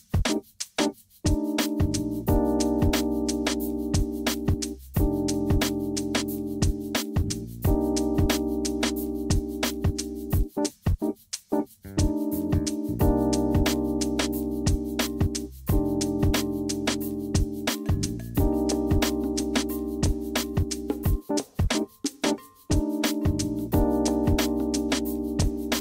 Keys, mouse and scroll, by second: 1.9-4.0 middle drag, 5.1 scroll down 1, 6.0-6.3 scroll up 1, 6.3 shift+middle click, 8.8-11.2 shift+middle drag, 12.1 shift+middle click, 12.5 scroll down 1, 12.8-13.5 shift+middle drag, 13.8-14.3 scroll up 1, 14.3-19.4 shift+middle drag, 19.9-20.2 shift+scroll down 1, 20.2-20.9 shift+middle drag, 21.4-25.8 shift+middle drag.